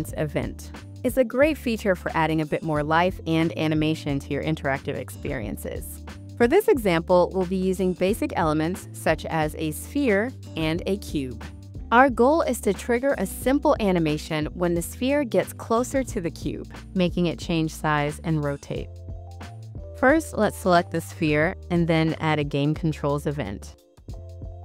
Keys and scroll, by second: 0.0-3.2 typing, 4.6 s, 5.8 a, 11.3-12.8 typing, 14.0 w, 14.9 a, 15.6 d, 16.6 a, 17.8 s, 18.4 a.